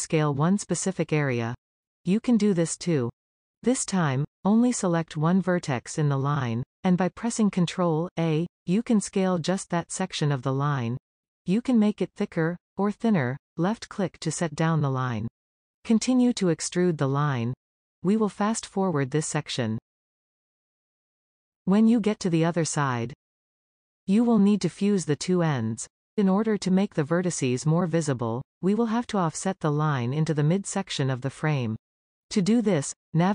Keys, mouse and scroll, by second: 2.4-4.6 middle drag, 4.6-6.1 scroll up 1, 6.1 click, 8.4 ctrl+a, 15.4-16.6 middle drag, 16.6 e, 17.5 e, 18.9 shift+middle click, 19.3-21.9 typing, 19.5 shift+middle click, 19.6 scroll down 3, 20.3 shift+middle click, 21.3 shift+middle click, 21.8 scroll up 2, 22.3 middle click, 22.9-24.5 shift+middle drag, 25.9-27.1 middle drag, 27.1-28.7 scroll down 2, 28.7-30.4 scroll up 2.